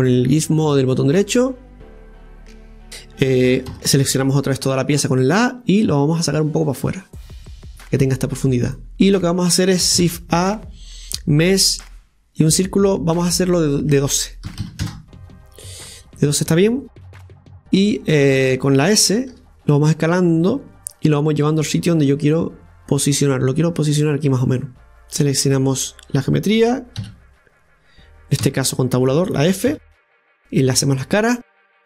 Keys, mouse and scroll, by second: 0.1 click, 1.2-2.9 drag, 2.9-3.7 scroll down 1, 3.7 a, 5.4-8.4 drag, 8.9 Tab, 10.0 shift+a, 13.6-16.7 drag, 17.6 Tab, 19.3 s, 21.4-24.6 drag, 25.0 right click, 27.0 f, 28.4 Tab, 29.7 f, 30.4 middle click, 30.9-31.6 scroll up 1, 31.6-31.8 scroll up 1.